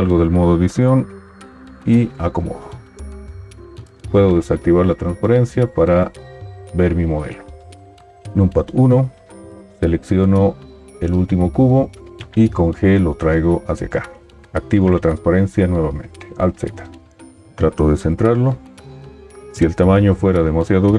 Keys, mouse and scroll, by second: 2.0 g, 4.1 alt+z, 8.1 KP_1, 12.5 g, 14.6 alt+z, 17.4 g.